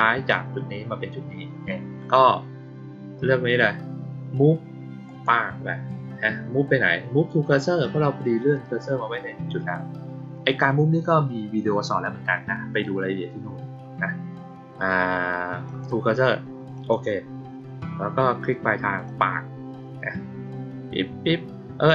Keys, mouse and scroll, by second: 5.0 click, 15.6 click, 16.7 click, 19.0-21.9 drag.